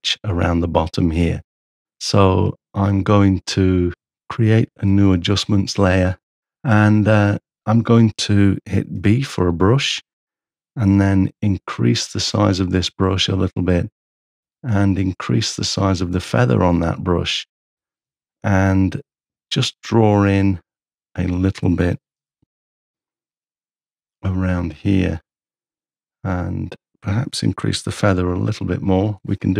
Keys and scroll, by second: 4.6 ctrl+super+a, 9.0 b, 11.1 ], 13.2 ], 14.6 shift+[, 22.2 m, 28.5 shift+[.